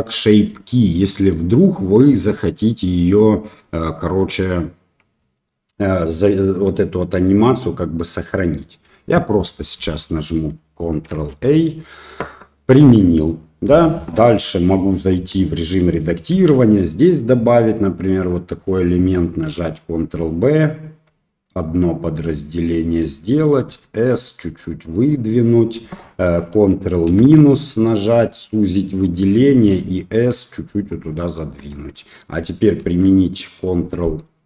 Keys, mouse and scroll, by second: 1.5-2.0 middle drag, 5.4 middle drag, 6.7-8.3 drag, 11.1 ctrl+a, 12.1-12.7 middle drag, 13.2 middle click, 14.7 middle click, 15.1 Tab, 16.3 ctrl+r, 18.2 middle click, 19.4 ctrl+b, 23.6 s, 27.0 ctrl+KP_Subtract, 28.3 middle click, 29.6 s, 31.5 Tab, 32.0 middle click, 32.9 ctrl+3, 33.8-34.4 middle drag.